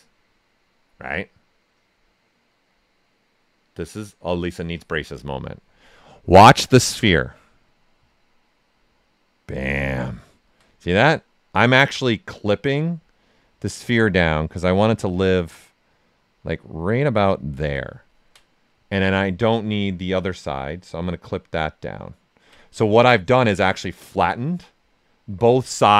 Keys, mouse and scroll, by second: 8.0-10.7 ctrl+drag, 10.7 right click, 12.3-18.0 ctrl+drag, 18.0 ctrl+right click, 18.5 right click, 20.0-23.3 ctrl+drag, 23.3 click, 23.7-25.9 right drag.